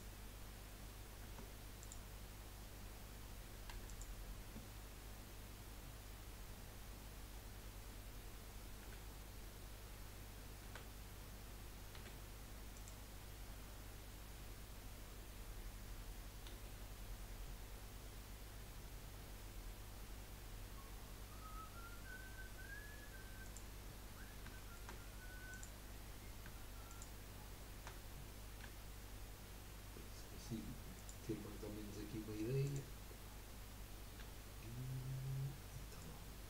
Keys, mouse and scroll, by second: 1.2 Tab, 1.8 click, 3.7 3, 3.8 click, 4.7-5.0 scroll down 2, 5.0-6.2 scroll up 1, 8.8 g, 10.6 a, 11.9 g, 13.1-13.9 scroll up 4, 16.5 g, 23.8 scroll down 3, 24.5 shift+middle click, 25.5 click, 26.9 shift+click, 28.6 g, 31.4-32.2 scroll down 1, 32.6 click, 34.2 g.